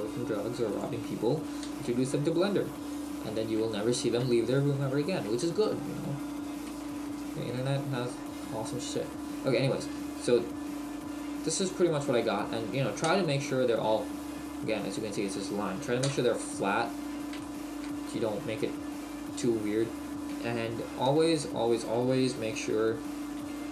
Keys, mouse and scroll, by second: 0.8 click, 1.3 right click, 1.7 g, 3.1 click, 4.6 shift+middle click, 8.7 middle click, 13.1 KP_3, 15.8-16.1 scroll down 2, 16.1 KP_1, 17.4 shift+middle click.